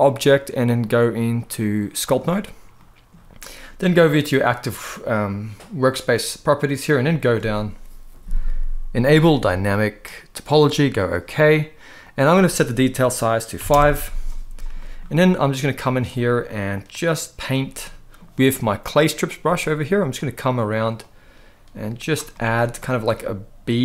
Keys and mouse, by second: 2.5 middle click, 4.2 click, 9.5-10.9 drag, 11.7-13.5 drag, 14.5 middle click, 15.3 middle click, 17.5 middle click, 19.1 middle click, 19.9 click, 20.7 click, 22.0 middle click, 23.7 middle click.